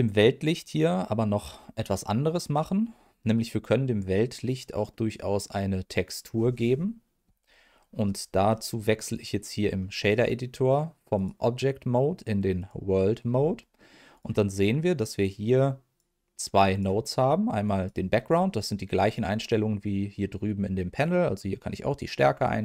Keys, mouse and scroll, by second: 2.0 middle click, 9.6 middle click, 11.1-12.7 drag, 13.2-14.1 scroll down 2, 13.7 middle click, 14.1 click, 14.6 click, 15.3 click, 16.7 click, 17.6 click, 21.0-22.1 drag, 22.3 click.